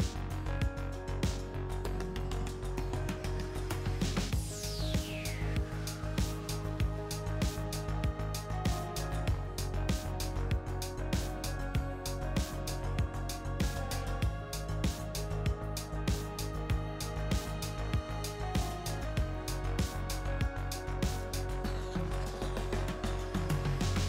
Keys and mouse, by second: 0.0-1.2 drag, 1.7-2.9 drag, 3.9-5.3 drag, 6.2-7.5 drag, 7.9-10.7 drag, 10.7 middle click, 13.2 click, 14.1 middle click, 17.5 Tab, 19.1 click, 20.1-21.3 drag, 20.1 right click, 23.4 right click.